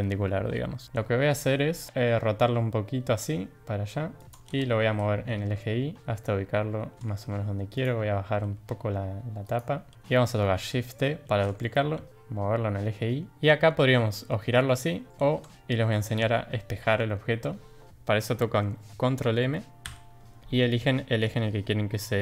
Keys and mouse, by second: 1.9 r, 6.6 r, 7.7 click, 8.1 g, 9.9 r, 11.3 shift+d, 14.1 r, 15.1 ctrl+z, 19.8 ctrl+m.